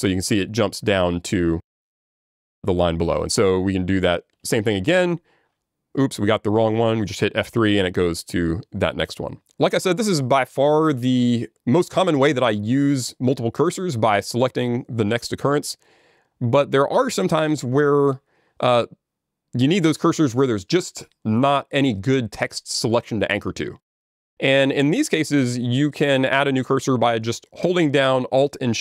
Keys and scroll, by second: 4.3 alt+j, 4.3 ctrl+g, 7.5 F3, 7.5 super+g.